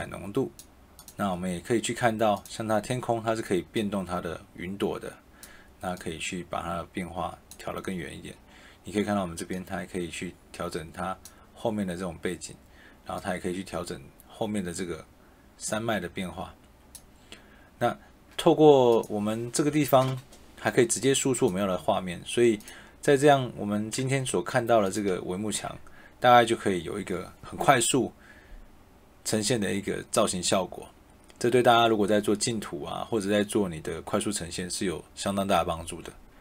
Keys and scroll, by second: 24.2 e.